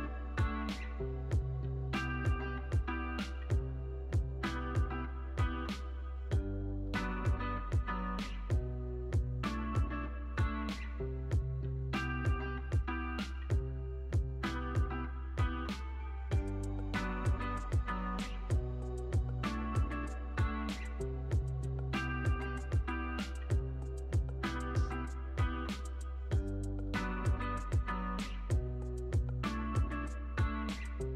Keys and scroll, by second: 2.7 x, 8.8 z, 9.5 x, 11.3 z, 11.7 x, 13.8 shift+s, 17.2 Left, 17.9 -, 18.1 Return, 22.8 x, 28.1 super+c, 28.3 super+v, 28.7 z.